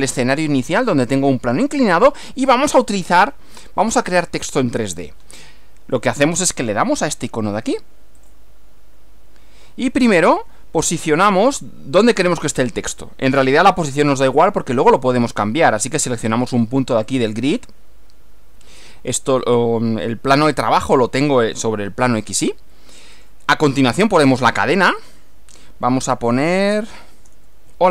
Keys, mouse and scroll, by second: 0.4-2.8 middle drag, 3.6 scroll down 1, 4.0 scroll up 1, 8.2 click, 17.1 click, 23.2 click, 25.0 click, 26.9-27.9 typing.